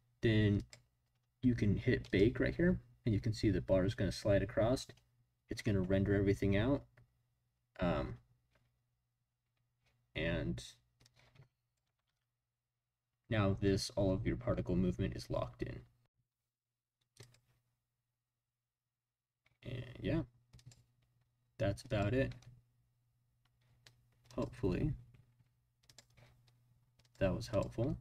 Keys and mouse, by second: 0.6 click, 2.0-3.3 drag, 11.2 click, 12.0 space, 15.6 space, 17.2 click, 17.2 middle click, 20.6-22.0 drag, 25.8 click, 27.0-28.0 drag.